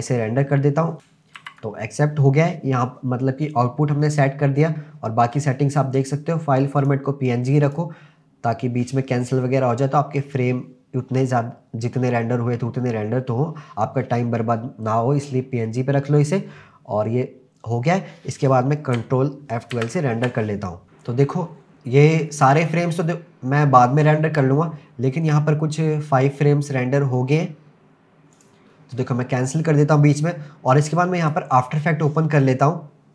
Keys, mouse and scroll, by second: 0.9 click, 1.4 ctrl+s, 5.2-5.7 scroll down 2, 6.8-7.6 drag, 7.7 click, 16.2 click.